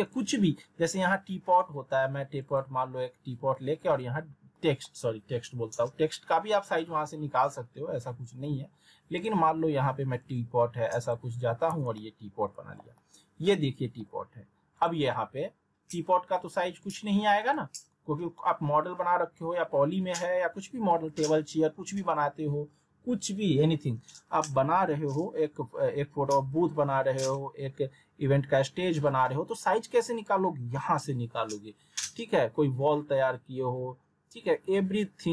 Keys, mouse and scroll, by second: 2.4 click, 3.7-4.1 alt+middle click, 6.1-6.7 scroll down 1, 9.2 click, 10.9-12.2 typing, 11.9-12.9 alt+middle click, 12.9-14.1 alt+middle drag, 14.7 click, 17.4 click, 18.4 middle click.